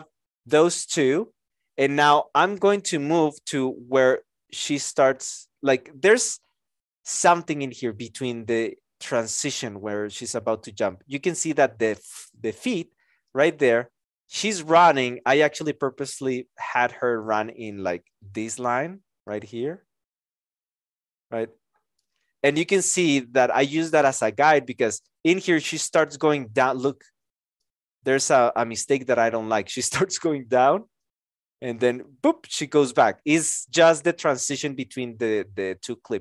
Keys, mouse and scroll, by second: 0.8 x, 1.0 Return.